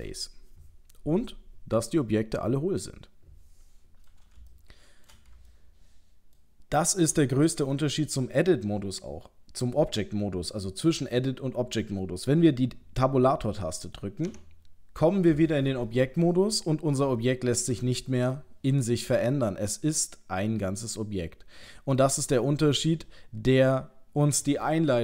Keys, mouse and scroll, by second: 1.9 middle click, 4.5 shift+middle click, 5.5 ctrl+middle click, 14.3 Tab, 15.7 middle click, 17.1 shift+middle click, 19.7 middle click.